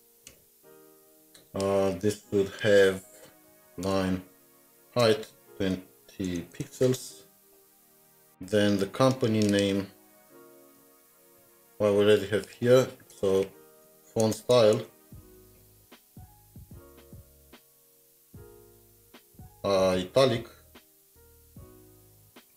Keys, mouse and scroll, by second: 0.0-0.3 typing, 2.3-3.5 typing, 4.9 Return, 5.7-7.5 typing, 8.5 scroll, 8.6 scroll down 1, 9.0 typing, 10.6 Return, 11.4 ctrl+z, 13.1 Return, 13.3-16.5 typing, 17.6 typing, 18.9 Return.